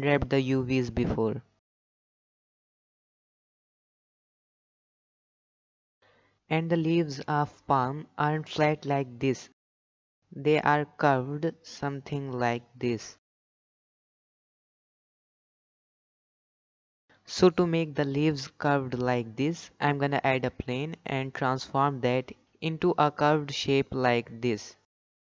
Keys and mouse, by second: 0.2 shift+middle click, 1.3 g, 2.4 alt+a, 2.6-4.4 typing, 3.4 alt+a, 3.5 shift+click, 3.6 shift+click, 6.2 middle click, 6.5-7.0 alt+middle drag, 6.5 z, 6.6 alt+a, 7.2 middle click, 8.1 KP_1, 8.5 shift+middle drag, 8.6 shift+middle drag, 9.1 click, 10.2 shift+middle click, 12.1-15.7 drag, 17.7 middle click, 20.2 KP_1, 21.1 shift+middle click, 22.9 click, 23.7 middle drag, 24.3 shift+a, 25.1 middle click.